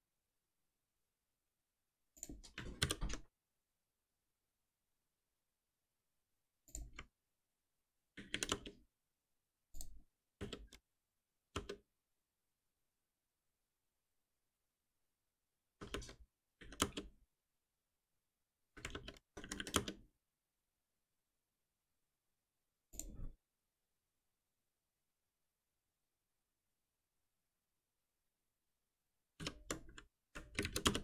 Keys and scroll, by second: 3.0 shift+F10, 7.3 alt+Return, 10.4 alt+Return, 15.8 alt+Return, 29.3 shift+F6.